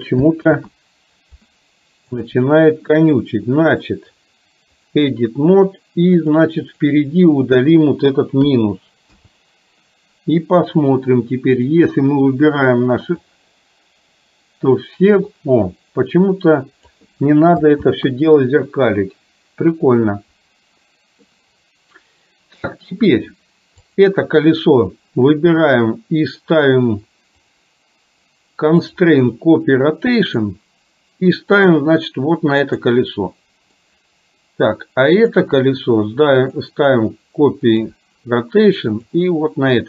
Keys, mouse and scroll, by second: 0.5 ctrl+z, 2.2 click, 3.8-9.9 right drag, 11.7 click, 13.3-17.0 drag, 17.9 ctrl+z, 21.3-22.7 middle drag, 27.5 click, 28.9-30.4 drag, 33.8-34.8 middle drag, 36.4-38.0 drag, 39.0 click.